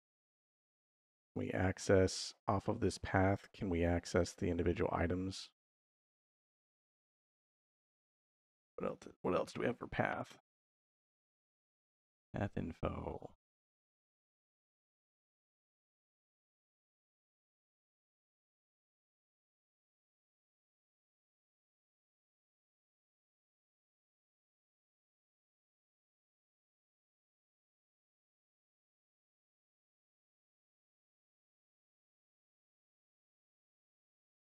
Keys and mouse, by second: 3.1 middle click, 3.9 middle click, 4.8 middle click, 6.0 shift+a, 16.7 x, 17.8 shift+a, 28.2 shift+a.